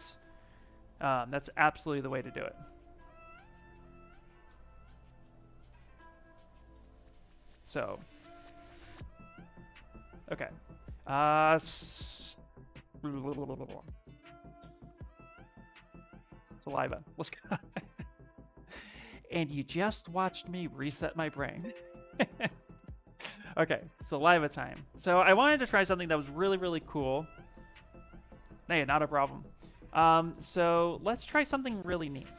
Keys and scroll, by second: 17.2 ctrl+s, 18.5 Escape, 21.4 Return, 22.2 Return.